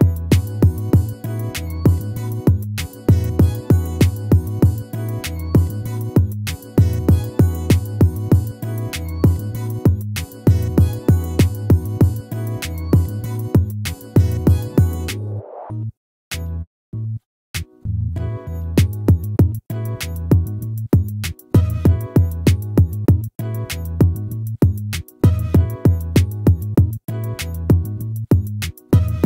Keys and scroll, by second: 11.3 ctrl++, 18.4 ctrl+-, 20.2 ctrl++.